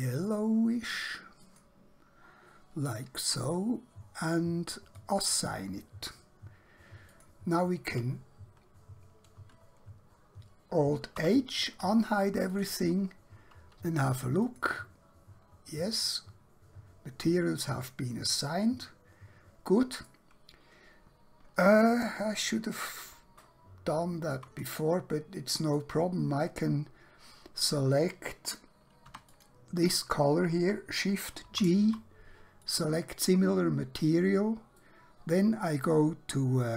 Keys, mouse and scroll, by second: 1.4 click, 5.0 click, 10.7 alt+Num_Lock, 11.2 alt+h, 12.6 click, 15.9 middle click, 22.3 scroll down 1, 22.6-23.2 scroll up 1, 23.5 shift+middle click, 24.8 middle click, 29.0 3, 29.2 click, 31.6 shift+g, 32.6 click, 34.8 middle click.